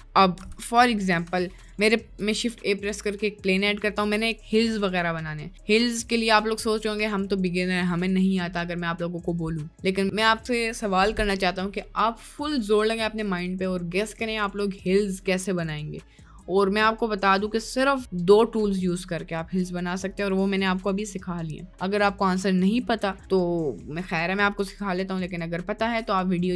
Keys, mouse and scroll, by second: 0.4 Delete, 0.6 click, 1.1 Delete, 2.3 shift+a.